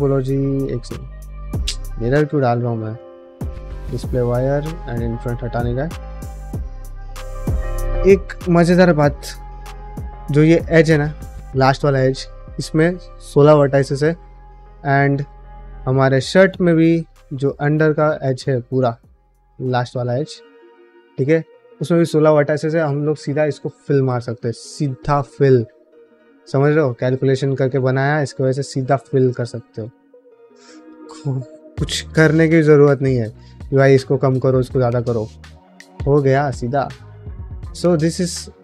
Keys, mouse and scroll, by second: 0.1 q, 2.0 click, 2.7 q, 3.9 q, 5.4 click, 5.7 shift+middle click, 6.2 click, 6.5 middle drag, 6.9 ctrl+middle drag, 7.3 shift+middle drag, 7.7-8.7 ctrl+middle drag, 8.7 Tab, 9.1 alt+z, 9.4 middle click, 10.4 alt+click, 14.8 Tab, 15.1 click, 15.5 alt+z, 16.0 Tab, 16.3 middle click, 17.3 alt+click, 17.9-19.8 middle drag, 19.9 alt+z, 20.2 middle click, 20.6 shift+middle click, 20.9 middle click, 27.1 middle click, 27.4 alt+z, 27.8 ctrl+middle click, 28.2 middle click, 28.6 ctrl+Tab, 29.3 click, 29.6 shift+middle click, 29.9 ctrl+middle click, 30.3 middle drag, 30.6 click, 30.8 shift+middle click, 31.2 ctrl+middle click, 31.5-31.9 middle drag, 32.8-35.1 middle drag, 35.2 shift+middle drag, 35.7 middle drag, 36.0 shift+middle click, 37.3 click, 37.6 click, 38.2 shift+middle drag.